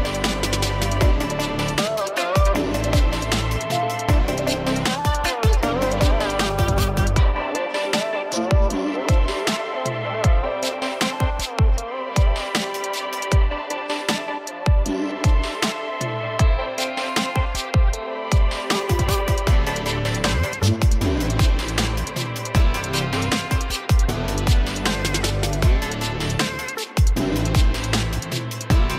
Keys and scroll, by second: 0.4 alt+space, 2.4 space, 5.8 [, 6.0 [, 6.2 [, 6.4 [, 14.3 [, 14.4 [, 14.5 [, 14.7 [, 16.4 [, 16.5 [, 17.1 [, 17.1 [, 19.2-19.7 ], 19.5 ], 21.8 ], 21.9 ], 22.9-23.9 typing, 25.3 ctrl+z, 25.8-27.2 typing, 28.5 ], 28.5 ].